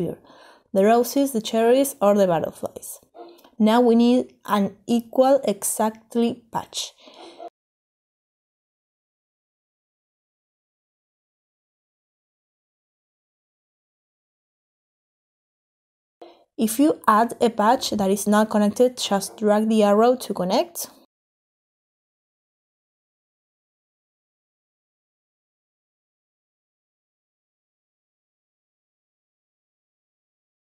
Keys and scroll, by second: 1.3-2.5 typing, 10.0 e, 10.2 q, 15.7 Delete, 24.0-24.4 typing.